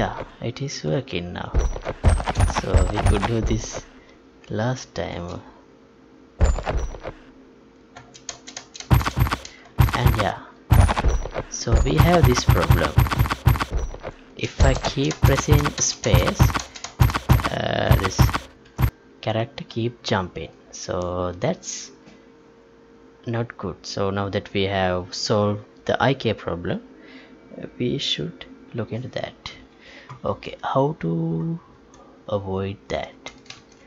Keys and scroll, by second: 5.1 space, 7.9 space, 14.3 space, 18.6 ctrl+p, 31.9 alt+Tab, 33.7 alt+shift+Tab.